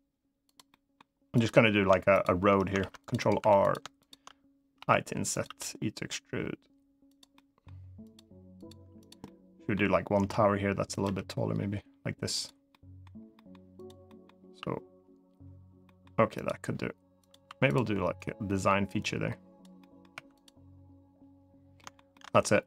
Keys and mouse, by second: 0.2 click, 0.2 e, 0.4 middle click, 1.1 click, 1.9 shift+click, 2.5 ctrl+r, 2.9 right click, 3.1 3, 3.7 shift+click, 4.5 i, 5.0 click, 5.2 e, 6.8 click, 7.1 middle click, 7.8 click, 8.7 click, 9.0 middle click, 9.9 i, 10.6 click, 10.8 e, 12.1 click, 12.4 middle click, 13.1 middle click, 13.5 click, 13.8 middle click, 15.6 middle click, 17.0 click, 17.2 2, 17.4 click, 17.9-19.3 drag, 19.5 middle click, 19.9 3, 20.1 click, 21.5 shift+middle click, 21.9 shift+middle click.